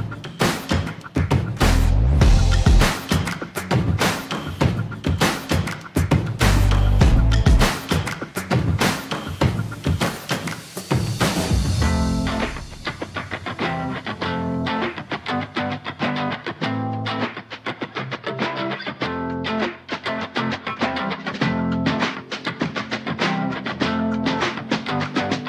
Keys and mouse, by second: 0.8 Tab, 1.4 shift+z, 1.7-2.8 middle drag, 3.6 click, 6.4 shift+middle click, 7.0 Tab, 8.5-11.0 drag, 11.4 shift+middle click, 12.3 shift+z, 12.7 middle click, 14.0 2, 14.6 click, 15.3 shift+z, 15.8 click, 16.5 shift+z, 16.8 click, 18.4 click, 19.2 ctrl+r, 20.8 s, 23.2 g, 23.4 g, 23.9 click, 24.3 shift+z, 24.6 Tab, 25.1-25.4 middle drag.